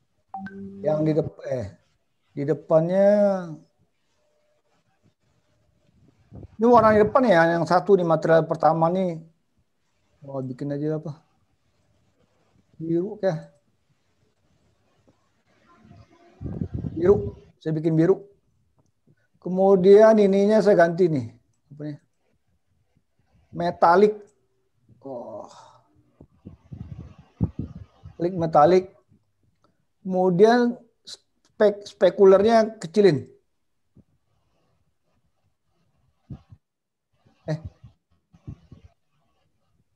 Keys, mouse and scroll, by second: 10.7 click, 13.4 click, 22.0 click, 24.5 click, 33.6 click.